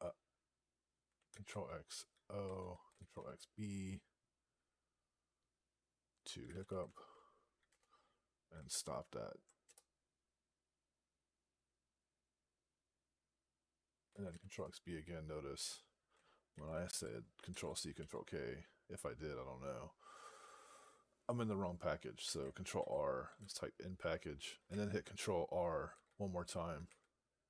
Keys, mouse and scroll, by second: 6.1-7.0 typing, 7.5 Return, 9.1 alt+p, 9.5 Return, 14.4 Return, 16.8 ctrl+k, 22.6 ctrl+r, 22.9-23.7 typing, 25.8 ctrl+r, 26.7 ctrl+r.